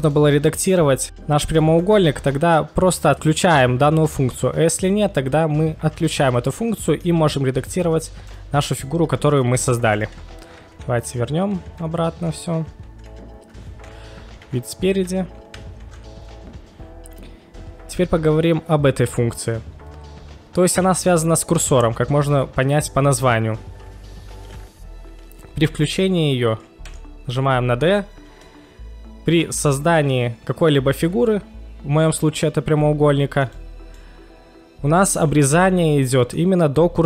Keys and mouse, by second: 0.1-0.7 middle drag, 1.6-2.0 middle drag, 6.8 middle drag, 7.7 click, 8.3 right click, 8.7 click, 9.3 g, 9.4 g, 9.4 z, 9.9 right click, 10.6 z, 11.1 ctrl+z, 11.6 ctrl+z, 11.8 ctrl+z, 12.5 ctrl+z, 12.6 ctrl+z, 12.9 ctrl+z, 14.4 KP_1, 15.9 ctrl+shift+x, 34.0-35.2 middle drag, 36.0 middle click.